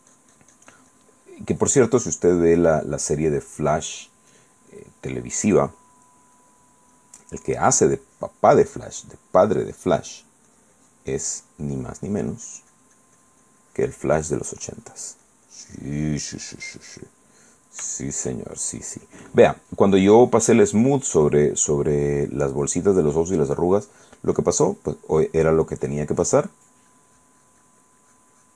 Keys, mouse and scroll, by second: 3.0 middle click, 4.5 click, 5.6 click, 6.6-10.0 drag, 10.1 middle click, 10.7-12.6 drag, 16.8 middle click, 17.6 middle click, 19.2-23.0 shift+drag, 23.8 click, 24.6 click, 26.1 click, 27.0-28.1 drag, 28.2-28.5 drag.